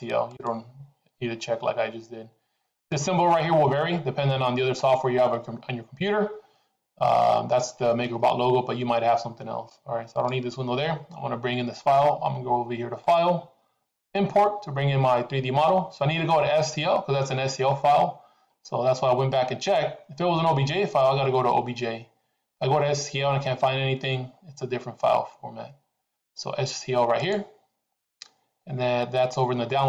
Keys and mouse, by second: 12.9-27.4 drag.